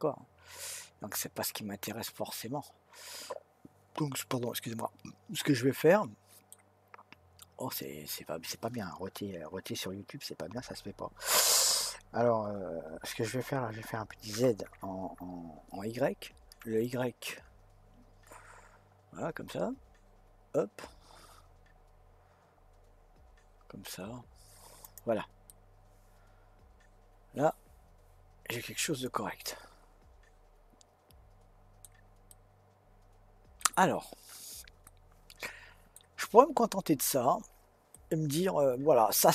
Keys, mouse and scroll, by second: 14.3 s, 25.4-28.6 middle drag, 32.3-36.5 middle drag, 36.5-36.9 scroll up 1, 36.9-37.9 scroll down 1, 37.9-39.3 middle drag.